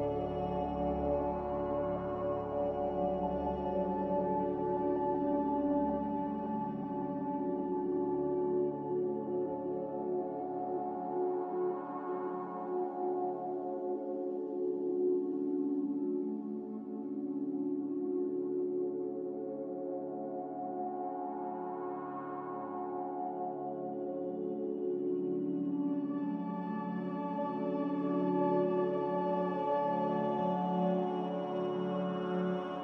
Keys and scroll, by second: 0.2 4, 1.7-2.2 typing, 2.2 Return, 7.2 a, 11.0-12.3 typing, 12.6 Return, 28.1 g, 29.5 typing, 29.7 Return.